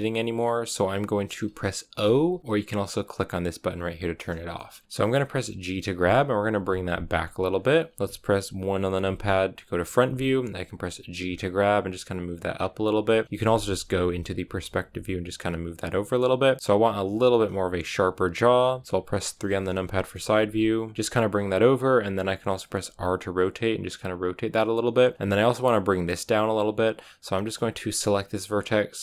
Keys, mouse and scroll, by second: 1.9 o, 2.9-4.5 drag, 4.5 shift+middle click, 4.7-5.5 scroll up 2, 5.5 g, 8.9 KP_1, 11.1 g, 13.0 scroll down 4, 13.3-14.6 middle drag, 14.6 g, 15.9 scroll up 1, 15.9-17.4 middle drag, 17.4 g, 19.2 KP_3, 19.9 middle click, 20.3 g, 22.7 r, 27.9-29.0 right drag.